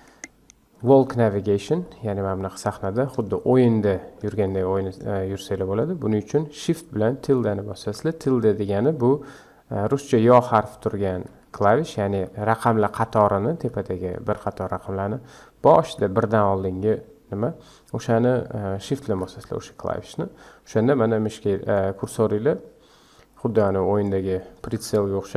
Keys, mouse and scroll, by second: 1.8-7.5 middle drag, 19.0 shift+`, 23.5-24.7 middle drag.